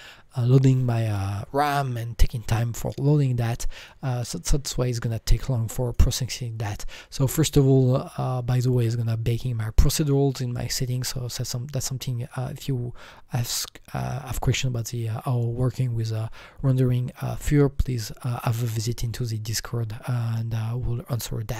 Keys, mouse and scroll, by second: 3.7-5.8 drag, 5.8 click.